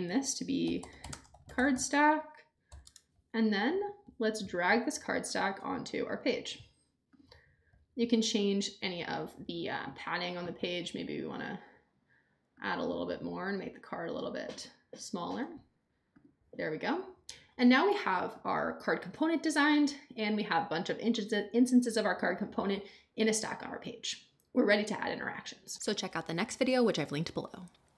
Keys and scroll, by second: 0.4-2.7 typing, 2.8 Return.